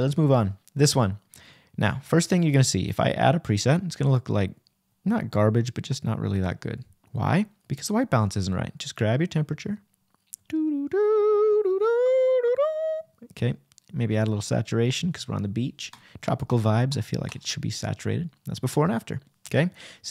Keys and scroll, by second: 8.4 \.